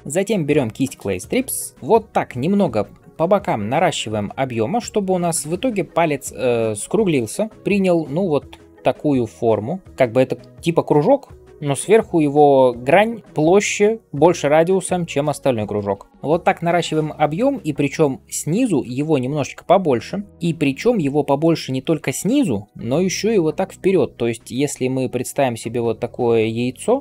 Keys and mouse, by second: 3.4 [, 7.5 d, 7.5-15.7 d, 16.1-27.0 middle drag, 16.1-27.0 right drag, 23.9-24.8 d.